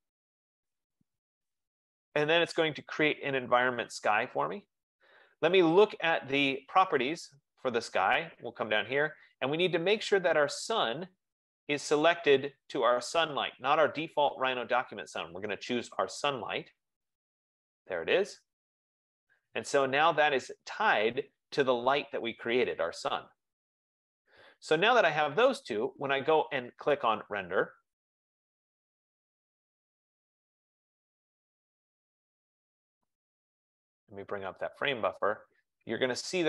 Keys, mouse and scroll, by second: 0.2 click, 4.0 click, 5.1 F15, 6.4-8.9 drag, 11.5-14.5 drag, 16.1 click, 27.8-32.6 drag, 34.9-36.4 drag.